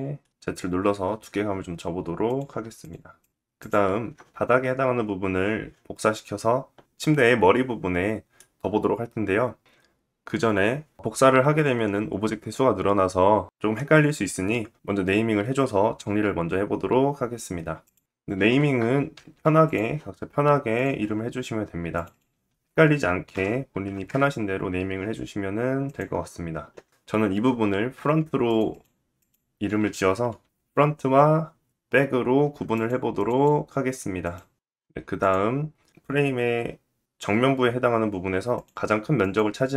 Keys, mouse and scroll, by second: 3.6 click, 13.1 middle click, 15.9 shift+middle click, 19.7 shift+middle click, 20.7-23.0 drag, 20.9 middle click, 22.5 KP_0, 23.0 middle click, 23.4 ctrl+click, 24.2-26.0 middle drag, 26.0-27.7 drag, 27.7 middle click, 27.8 click, 28.6 middle click, 28.9-30.2 shift+drag, 29.8 t, 30.2 middle click, 30.3 click, 30.4 middle click, 30.5 ctrl+click, 30.8 BackSpace, 31.5 click, 31.5 d, 31.8 middle click, 32.0-33.0 ctrl+drag, 32.3 BackSpace, 33.0 middle click, 33.3-34.6 ctrl+drag, 33.7 BackSpace, 34.1 BackSpace, 34.4 t, 34.6-38.1 middle drag, 38.1 click, 38.2 middle click, 38.8 click, 38.9-39.7 middle drag.